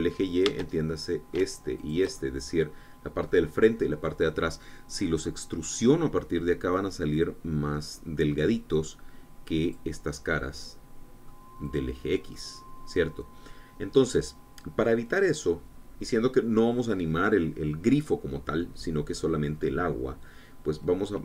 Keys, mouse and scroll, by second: 0.0 shift+click, 0.7 shift+click, 1.6-2.6 shift+middle drag, 2.6 shift+click, 3.1 shift+middle click, 4.1-11.0 drag, 11.0-12.3 middle drag, 12.6 click, 12.9-13.2 scroll down 1, 13.2-21.2 middle drag.